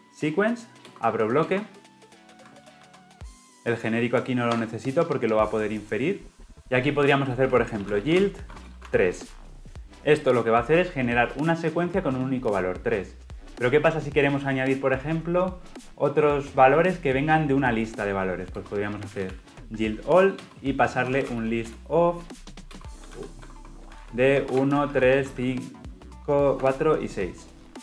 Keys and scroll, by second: 0.8 Return, 2.6 ctrl+z, 20.3 Return.